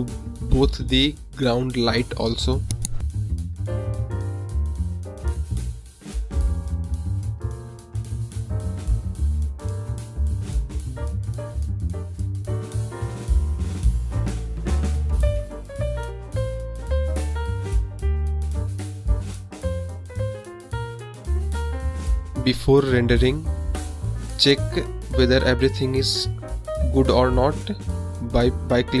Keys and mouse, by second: 0.5 click, 2.2 click, 2.6-4.3 drag, 5.0 click, 5.7 click, 6.4 click, 7.2 click, 7.9-8.9 drag, 9.3 click, 10.1 click, 10.8-11.8 drag, 12.4 click, 13.2 drag, 13.9 space, 18.9 space, 21.2 click, 22.3 middle click, 22.5 middle drag, 23.4 drag, 24.4 click, 24.8 click, 25.8 click, 26.9 KP_0, 28.3-29.0 drag.